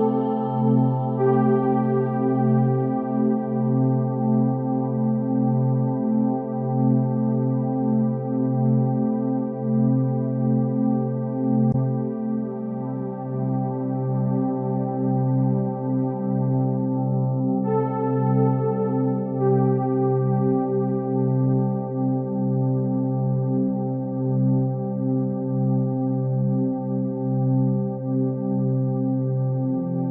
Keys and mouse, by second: 2.5 KP_1, 3.3 Tab, 4.7 Tab, 5.0 1, 5.7 click, 6.3 g, 14.3 Tab, 14.7 alt+z, 15.0 click, 15.6-16.8 middle drag, 17.0 click, 17.3 Tab, 17.7 ctrl+r, 20.0 ctrl+r, 22.8 Tab, 23.1 click, 23.4-25.6 middle drag, 26.0 Tab, 26.6 alt+z, 28.9 KP_3.